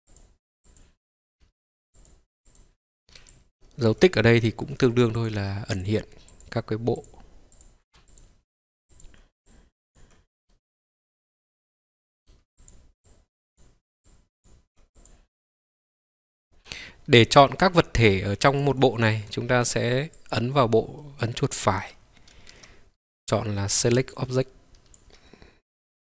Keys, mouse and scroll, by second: 4.5 click, 5.8-10.6 drag, 10.6-12.4 middle drag, 12.6-17.3 drag, 20.2 click, 21.0-24.7 right drag.